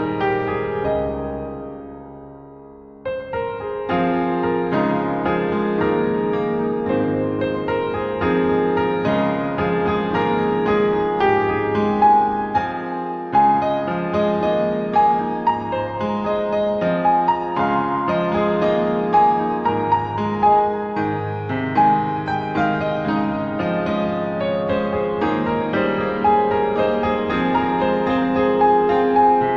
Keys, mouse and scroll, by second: 0.6 click, 2.2 click, 3.8 click, 8.8 click, 10.4 click, 11.2 click, 16.4 o.